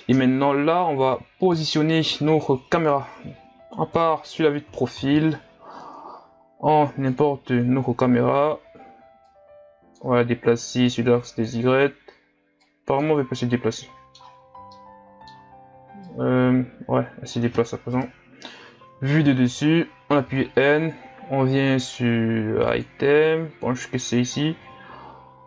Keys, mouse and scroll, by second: 1.5 KP_3, 7.2 shift+a, 13.4-13.7 scroll down 2, 13.7-16.1 middle drag, 16.1-18.0 drag, 18.0 KP_7, 18.9-20.3 scroll down 4, 20.3 n, 24.8 click.